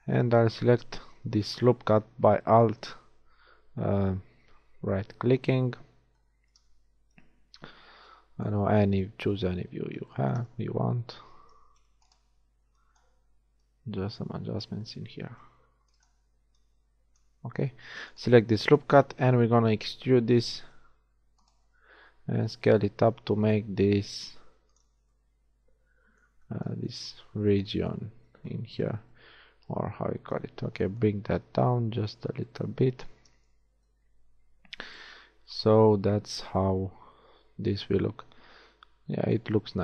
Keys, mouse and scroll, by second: 5.4 KP_3, 7.2 KP_1, 11.2 a, 11.6 b, 12.4 z, 12.7 b, 15.2 a, 15.7 b, 16.6 click, 17.4 z, 18.2-19.3 middle drag, 19.3 KP_1, 20.7 e, 22.6 s, 28.2 z, 28.9 z, 31.0-32.5 drag, 32.5-33.5 middle drag, 33.7 Tab.